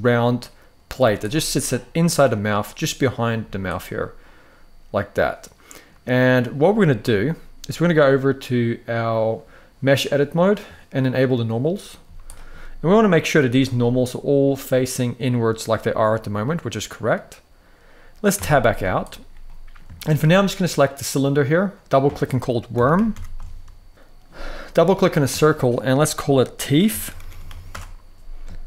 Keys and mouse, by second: 0.1-0.6 middle drag, 0.7 z, 1.2-2.0 middle drag, 3.1 z, 3.7-5.6 middle drag, 9.7-11.3 drag, 11.5 middle click, 11.7 z, 12.2 middle click, 13.2 z, 13.6-14.1 middle drag, 15.4-16.8 middle drag, 18.1 Tab, 18.5 z, 19.2 middle click, 19.7 shift+middle click, 21.4 click, 21.6-23.7 drag, 24.5-27.4 drag, 26.9 e.